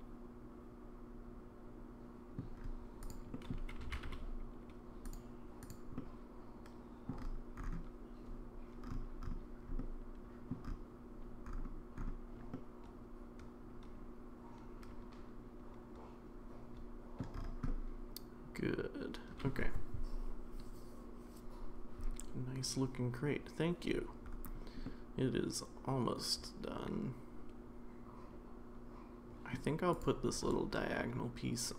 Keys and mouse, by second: 3.1 click, 3.3 middle click, 3.8 g, 5.7-6.0 drag, 6.0-7.1 middle drag, 9.8-10.5 middle drag, 12.5-17.2 middle drag, 17.7-19.4 middle drag, 24.8-29.5 middle drag, 30.0 click, 30.9-31.7 middle drag.